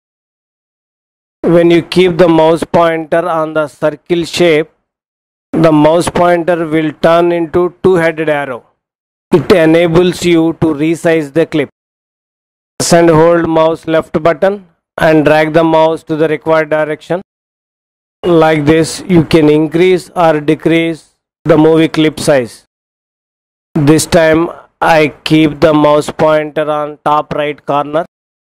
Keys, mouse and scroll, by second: 14.9-17.9 drag.